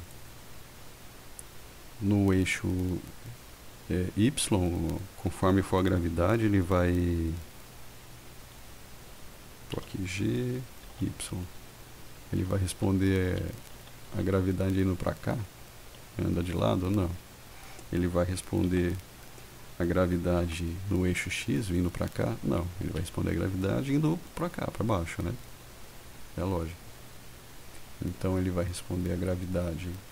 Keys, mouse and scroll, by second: 0.0 click, 9.9 g, 11.0-14.2 typing, 16.8 Escape, 18.7 g, 20.5 x, 22.9 Escape.